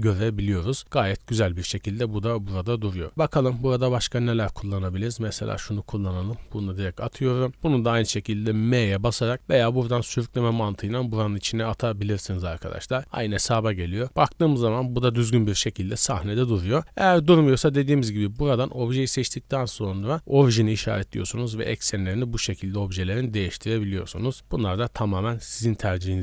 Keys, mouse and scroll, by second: 0.4 scroll down 2, 1.0-1.4 middle drag, 1.4-1.7 scroll down 1, 2.2 click, 2.2 right click, 3.1 click, 5.5 click, 8.7 m, 9.9 drag, 13.5 z, 14.0 scroll up 2, 14.4-15.1 middle drag, 15.5 scroll down 1, 15.9-16.8 middle drag, 18.2-20.8 drag, 21.1 r, 23.4 right click, 23.8 r, 26.1 z.